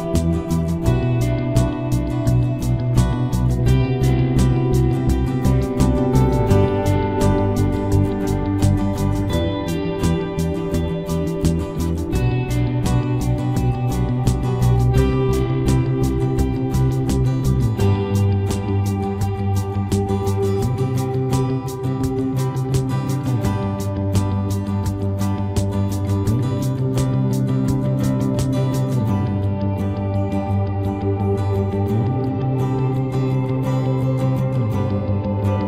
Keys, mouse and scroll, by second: 3.6-5.4 right drag, 4.4 middle click, 5.4-6.9 middle drag, 5.5-7.3 right drag, 6.0 c, 10.8-12.5 drag, 11.9 c, 12.5 middle click, 13.3-15.1 drag, 13.7 c, 20.5-23.6 drag, 22.6 c, 29.0-30.9 right drag, 30.4 c, 34.4-35.6 right drag, 35.4-35.6 middle drag.